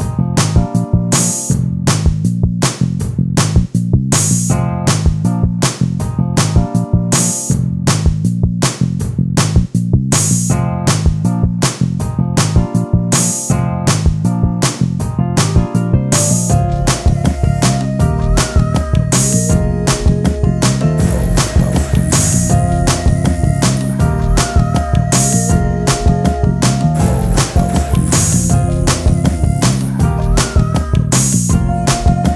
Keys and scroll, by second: 25.4 space.